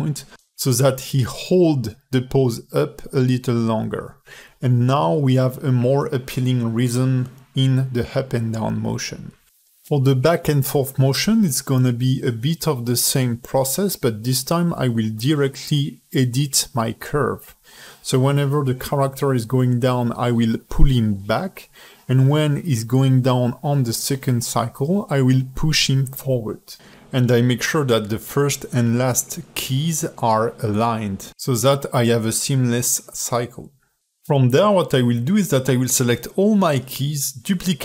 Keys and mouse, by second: 0.4 drag, 1.3 shift+drag, 2.1-2.5 shift+drag, 3.1 shift+h, 3.5 ctrl+alt+middle click, 4.5 s, 5.9 space, 8.6 ", 10.1 shift+drag, 10.5 alt+shift+middle click, 10.7 space, 11.1 space, 11.3-11.8 drag, 11.9 drag, 12.2 g, 12.9 g, 13.9-14.2 drag, 14.3-15.2 drag, 15.5 click, 15.7 g, 16.3-17.3 drag, 17.4-21.1 typing, 19.6 drag, 20.4 drag, 22.2 space, 23.5 space, 23.8-26.5 drag, 26.6 drag, 26.8 g, 27.8-28.6 drag, 28.7 drag, 28.9 g, 29.6 click, 29.8 g, 30.4 r, 31.2 shift+d, 32.5 click, 32.8 space, 35.8 click, 36.0 space, 36.7-37.8 drag.